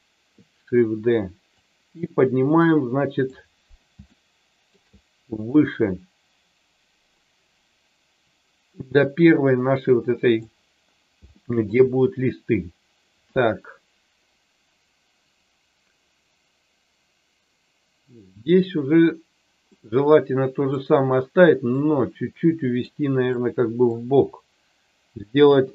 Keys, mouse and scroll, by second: 1.5-3.2 drag, 4.0 shift+middle click, 5.5-10.4 drag, 11.4 shift+middle click, 19.6-20.8 middle drag, 21.7-22.7 drag, 23.2 middle click, 25.4 KP_7.